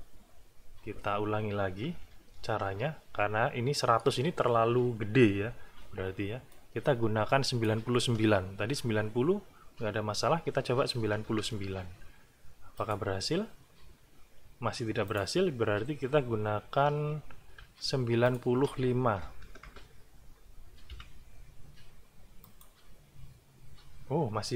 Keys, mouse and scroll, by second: 2.1 alt+`, 6.5-7.8 drag, 11.0 KP_9, 12.7 click, 15.1 click, 16.8 alt+`, 18.2 click, 19.2 BackSpace, 20.9 KP_5, 22.4 click.